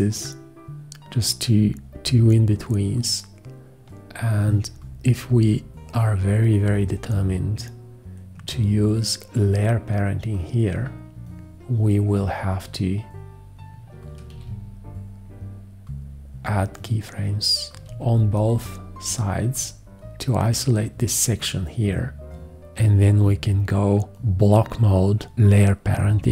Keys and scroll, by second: 14.3 x, 17.8 x.